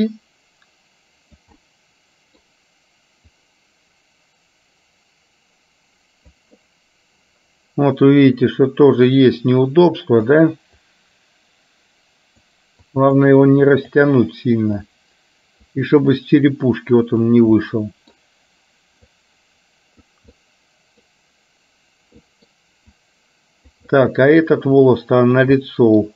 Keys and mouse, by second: 0.0-1.5 drag, 1.7 middle click, 3.5-6.5 drag, 8.6 click, 10.1 click, 10.8-12.5 drag, 13.0 click, 13.7 click, 14.8-15.8 drag, 16.2-17.3 drag, 17.7 middle click, 19.2-20.2 drag, 20.5 middle click, 22.2 middle click, 23.1 click, 24.1 middle click, 24.8 click, 25.7 middle click.